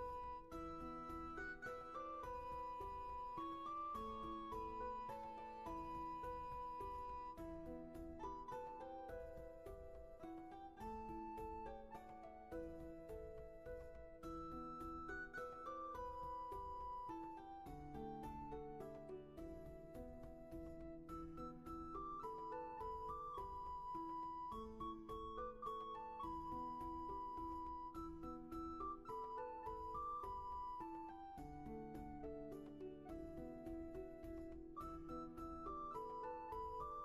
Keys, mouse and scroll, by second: 11.2-12.8 scroll up 1, 12.8 scroll down 1, 15.6-16.2 scroll down 1, 16.2 space, 17.0 scroll up 1.